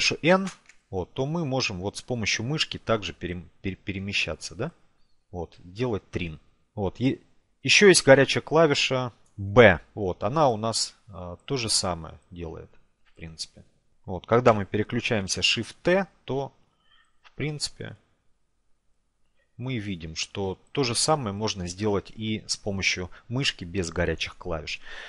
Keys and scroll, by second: 8.0 b.